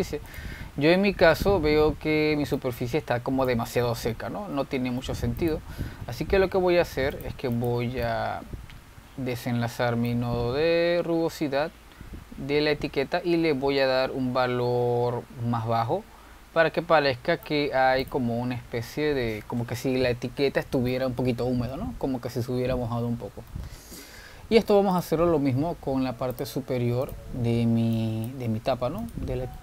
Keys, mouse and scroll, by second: 1.5 click, 3.7-5.7 drag, 5.7 middle click, 6.6-8.4 drag, 8.7 click, 9.4 x, 11.3-16.2 drag, 19.2 click, 19.9-20.3 scroll down 3, 21.2-22.6 scroll down 2, 22.6-25.7 middle drag, 25.7-26.3 scroll up 3, 26.4 click, 27.2 shift+q, 28.3-29.0 drag, 29.2 click.